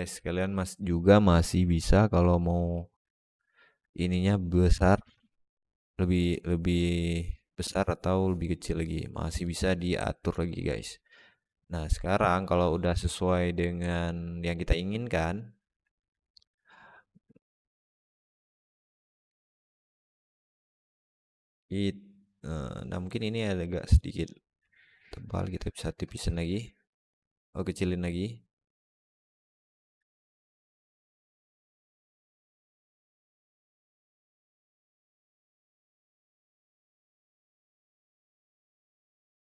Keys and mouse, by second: 0.1 alt+shift+middle drag, 3.0 alt+shift+middle drag, 3.3 alt+middle drag, 4.8-9.3 shift+middle drag, 9.9 alt+middle drag, 10.3 shift+middle drag, 10.6-12.1 alt+middle drag, 13.7-15.5 alt+middle drag, 16.1 alt+middle drag, 17.4-18.8 shift+drag, 19.2-22.9 alt+middle drag, 24.4-25.7 shift+drag, 26.2-29.7 alt+middle drag, 31.4-33.0 shift+drag, 33.8-38.7 alt+middle drag.